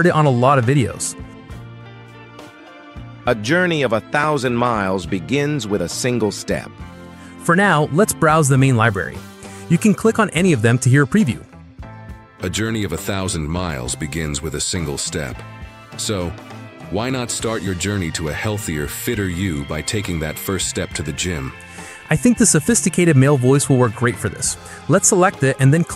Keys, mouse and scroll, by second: 0.3 click, 7.1 click, 11.2-12.3 drag, 19.1 click, 22.7 click.